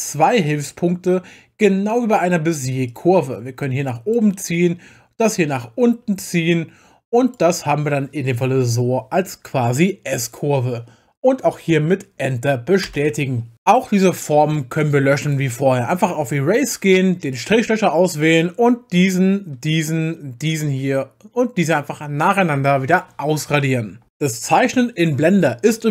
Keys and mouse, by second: 2.9 click, 12.9 Return, 15.2 click, 17.3 click, 18.1 click.